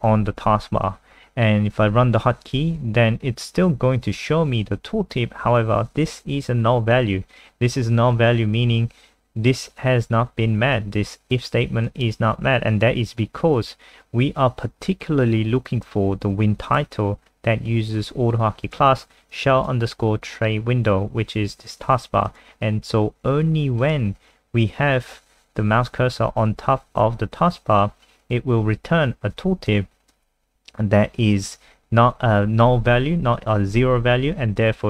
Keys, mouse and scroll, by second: 2.5-3.5 scroll up 1, 11.3 click, 27.4-28.4 scroll up 1, 29.7 alt+click.